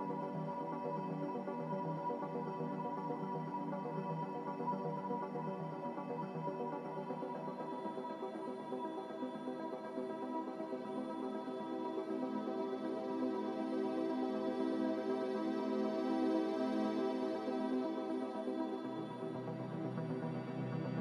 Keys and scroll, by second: 2.0 ctrl+c.